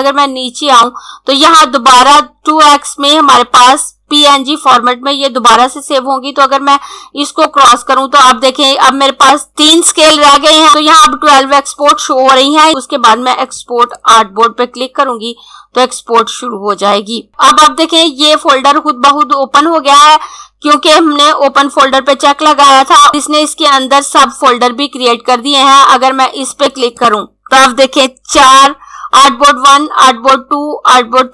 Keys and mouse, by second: 0.0 click, 7.2 click, 13.7 click, 26.5 click.